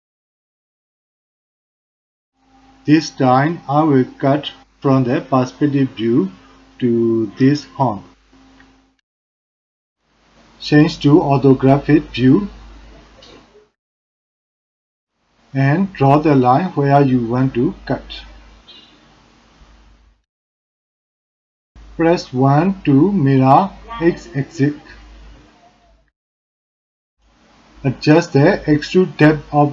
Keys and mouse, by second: 1.7 click, 3.6 shift+click, 4.2 shift+click, 4.2 shift+middle click, 4.8 shift+click, 7.7 click, 8.7 middle click, 11.1 middle click, 12.6 middle click, 13.1 click, 13.3-13.8 middle drag, 14.0 shift+click, 14.2 middle click, 14.3 shift+click, 14.5 middle click, 15.5-16.3 drag, 23.9-29.7 drag.